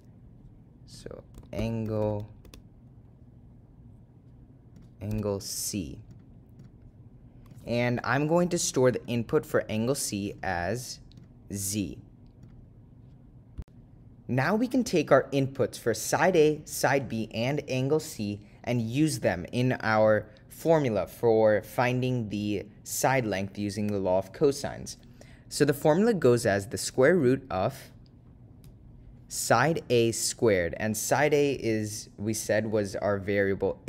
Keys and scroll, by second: 2.2 ), 4.9 0, 6.7 ., 7.3 0, 10.5 ,, 12.6 2, 20.1 Return.